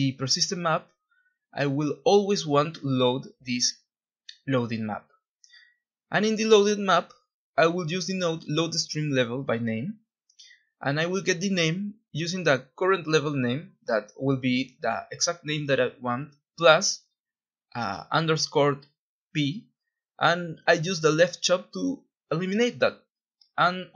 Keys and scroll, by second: 0.0-0.5 typing, 2.8-4.5 typing, 7.0 typing, 7.0 Return, 9.8 Escape, 10.6 Delete, 10.7-15.3 typing, 16.9 Escape, 17.5 Delete, 19.4 Left, 20.7 typing, 20.9 Return, 21.8-23.5 typing.